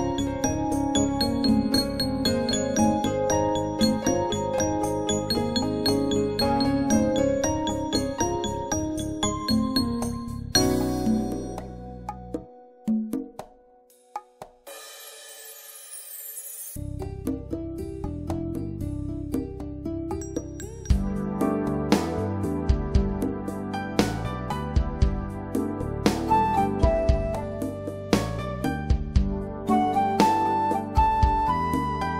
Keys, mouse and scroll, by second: 1.7 click, 3.9 right click, 4.1 click, 6.3-6.7 typing, 6.9 Return, 12.0 click, 17.1 click, 18.7 scroll up 1, 18.9 scroll down 1, 21.1 click, 25.8 click, 27.4-28.2 typing.